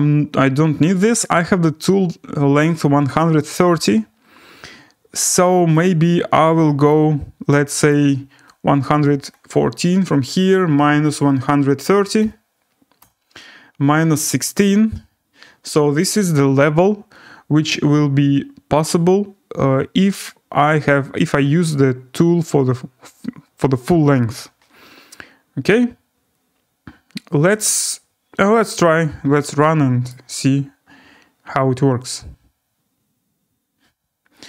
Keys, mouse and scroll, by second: 1.7-2.6 scroll, 3.3-4.0 scroll, 4.0-4.4 scroll, 6.9 click, 7.9 click, 8.4-9.0 1, 10.1-12.3 typing, 13.0 Return, 14.5 scroll down 3, 21.1 middle click, 22.2 middle click, 28.6 click, 30.1 right click, 30.8 scroll up 3.